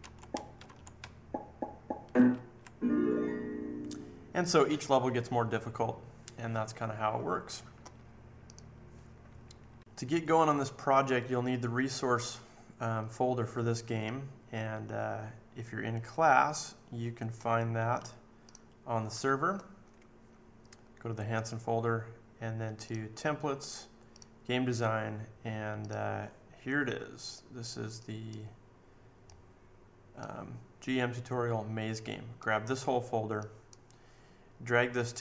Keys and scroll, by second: 0.0 Left, 0.2 Down, 0.6 Left, 1.0 Up, 1.5 Up, 1.7 Up, 1.9 Up, 2.0 Up, 2.3 Up.